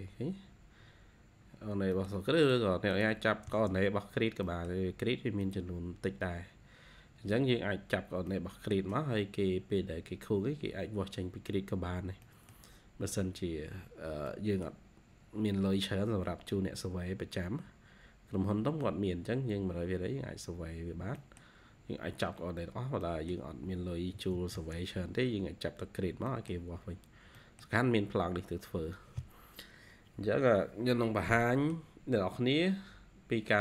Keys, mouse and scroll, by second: 0.0-1.5 scroll up 3, 1.6 scroll down 2, 2.8 double click, 3.4 e, 3.8-4.1 scroll up 1, 4.1 e, 4.4 middle click, 4.7-5.3 scroll down 4, 5.3 middle click, 5.9 scroll up 2, 7.0 scroll up 2, 7.9 scroll down 2, 9.1-9.7 scroll up 2, 11.3 scroll down 1, 11.5 scroll up 1, 11.7-12.1 scroll down 1, 12.2 middle click, 12.9-14.0 scroll down 2, 14.2 middle click, 14.6-15.2 scroll down 1, 15.2-15.7 scroll up 2, 19.7 scroll up 1, 20.6-21.1 scroll down 1, 21.1 middle click, 22.6-22.9 scroll down 2, 23.7-24.0 scroll up 1, 23.8-26.7 typing, 25.0-25.3 scroll up 1, 25.3 scroll, 25.5 scroll up 1, 25.9 scroll down 1, 26.9 scroll down 3, 27.3 middle click, 31.0 scroll down 1, 31.3 middle click.